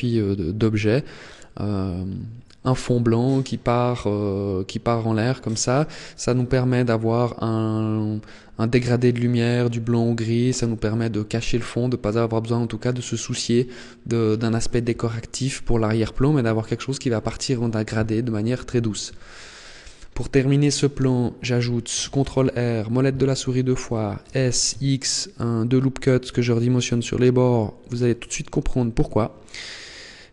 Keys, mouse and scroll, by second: 19.0-19.6 scroll down 3, 19.6 middle click, 20.8 shift+middle click, 22.0 ctrl+r, 23.6 click, 24.2 s, 27.7 click, 28.6 Tab.